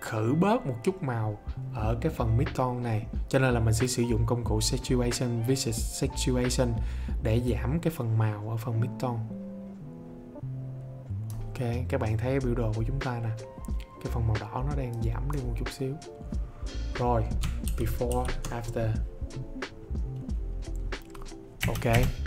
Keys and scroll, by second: 17.6 ctrl+d.